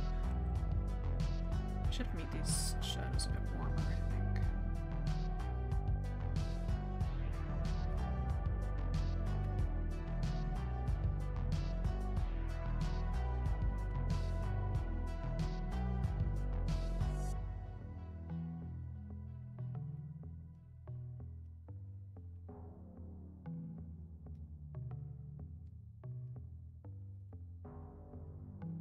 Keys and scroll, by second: 23.7-24.0 scroll up 1, 24.2 scroll, 24.9 scroll up 1.